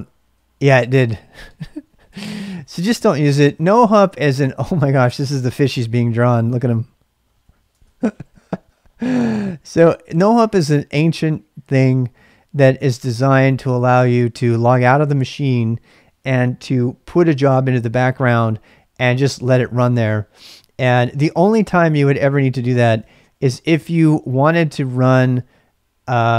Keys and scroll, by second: 3.3-5.6 typing, 6.7-8.4 typing.